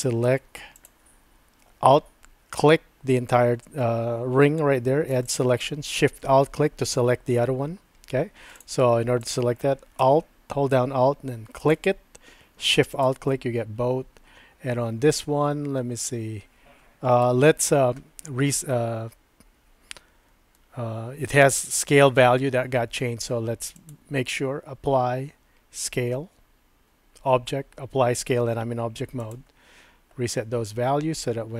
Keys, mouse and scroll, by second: 0.0 click, 0.8 alt+click, 5.2 alt+shift+click, 13.0 alt+shift+click, 17.2 Tab, 17.3 typing, 23.7-29.3 drag, 30.8 Tab.